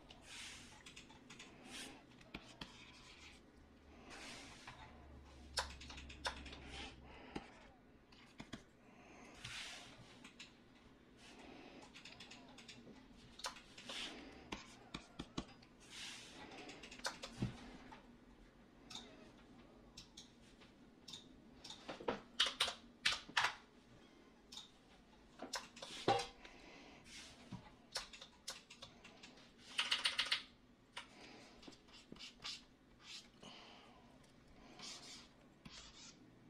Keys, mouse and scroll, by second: 22.4-23.0 typing, 23.4 Return, 29.8-30.9 typing.